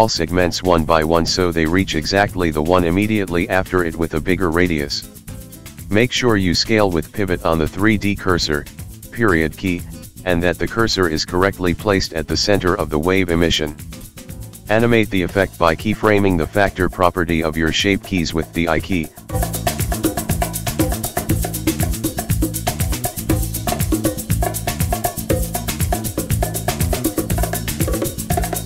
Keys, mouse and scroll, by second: 0.1 click, 0.7 shift+click, 2.3 click, 2.7 shift+click, 3.1 s, 4.1 click, 4.4 shift+click, 4.9 s, 5.7 click, 6.0 shift+click, 6.5 s, 8.4 Tab, 8.9-10.0 scroll down 16, 10.0 click, 12.2 click, 12.8 right click, 13.8 click, 14.5 Tab, 14.9 click, 15.5 shift+click, 16.4 x, 17.6 Tab, 18.1-19.0 scroll down 14, 21.5 click, 22.3 right click, 23.3 click, 23.6 click, 24.9 click, 25.3 click, 26.2 click, 26.5 click, 27.0 click.